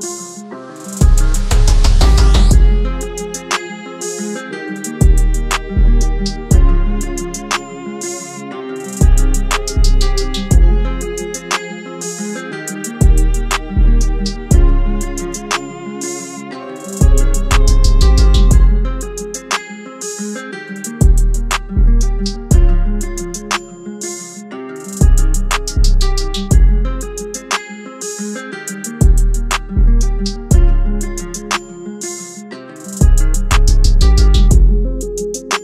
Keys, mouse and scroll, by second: 2.1-3.9 typing, 5.5 double click, 8.8 double click, 13.0 typing, 35.5 double click.